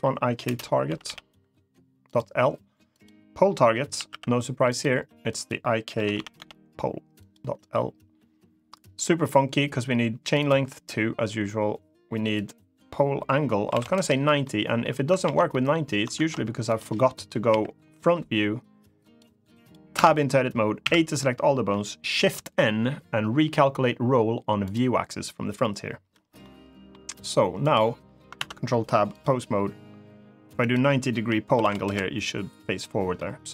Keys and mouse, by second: 2.7-4.6 drag, 5.1-7.1 drag, 10.0 click, 12.2-13.9 drag, 14.2-14.5 middle drag, 15.0 ctrl+z, 15.2 middle click, 15.9 ctrl+Tab, 17.2 KP_1, 18.7 click, 19.3 click, 19.7 Tab, 20.5 a, 21.9 shift+n, 26.1 middle click, 27.4 click, 28.1 ctrl+Tab, 30.4-31.7 drag, 32.9-33.3 middle drag.